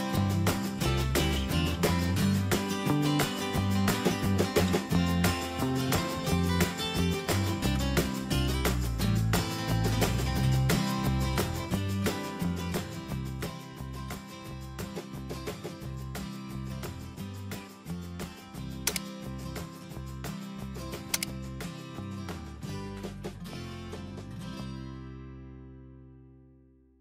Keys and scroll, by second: 1.1 ctrl+Return, 2.0 Up, 3.5 ctrl+space.